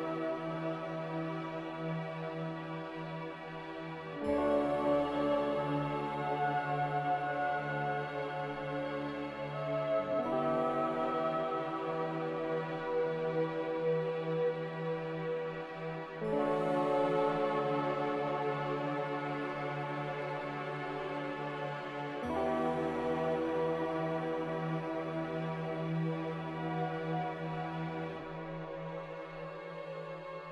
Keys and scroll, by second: 15.6 ctrl+z, 19.2 z.